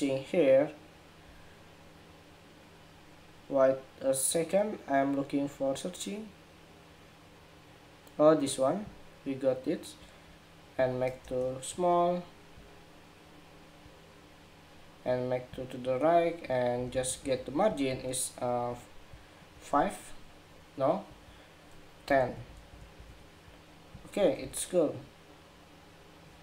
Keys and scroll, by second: 21.8 alt+Left, 22.0 alt+Left, 22.2 alt+Left, 22.4 alt+Left, 22.7 alt+Left, 24.1 super+-.